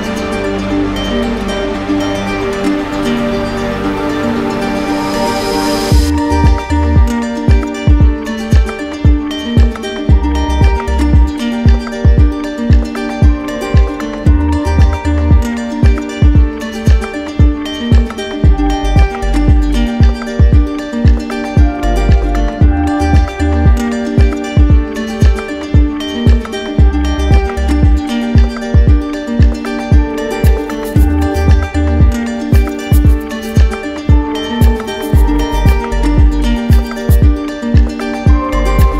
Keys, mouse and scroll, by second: 1.3-1.8 scroll, 7.3 scroll, 7.4 middle click, 7.6 middle click, 10.6 middle click, 11.0 ctrl+z, 11.0 click, 11.7 ctrl+z, 12.7 click, 12.8 click, 13.0 click, 13.2 scroll, 13.5 click, 13.8 scroll, 15.5 click, 16.9 ctrl+z, 17.5 ctrl+z, 23.1 middle click, 23.8-25.1 scroll, 24.3 middle click, 24.4 middle click, 30.1 click, 30.8 shift+click, 35.1 click, 35.4 ctrl+z, 35.9 click, 36.3 right click, 37.6 click.